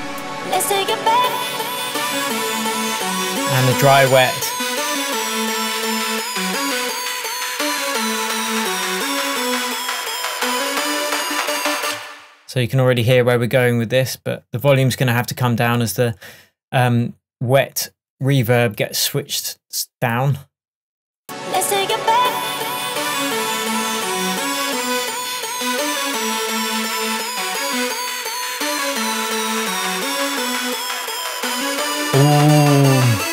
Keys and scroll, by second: 11.9 space.